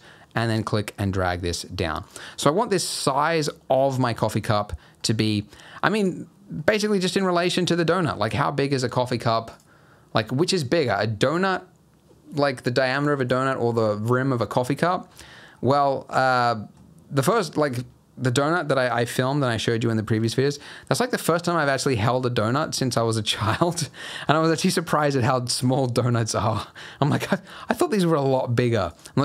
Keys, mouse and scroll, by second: 2.2-2.7 scroll up 7, 2.7 middle click, 3.3-3.7 scroll up 3, 3.7 middle click, 4.3 g, 6.5 middle click, 7.0 s, 7.8 g, 15.0-15.7 scroll up 3, 15.7 middle click, 16.1 scroll down 1, 16.4 middle click, 28.9 click.